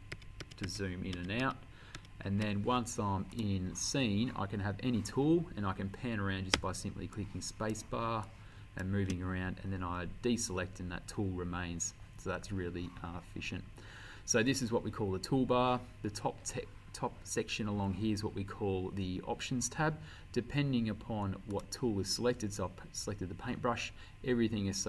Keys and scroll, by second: 0.2 ctrl+-, 1.2 ctrl+=, 6.6 space.